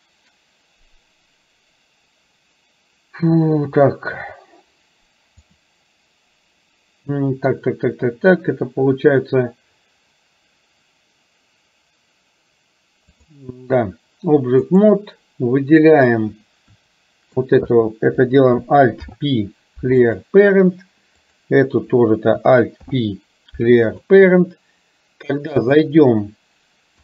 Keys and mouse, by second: 5.5-13.3 drag, 14.7 click, 19.0 alt+p, 22.9 alt+p, 25.7 click.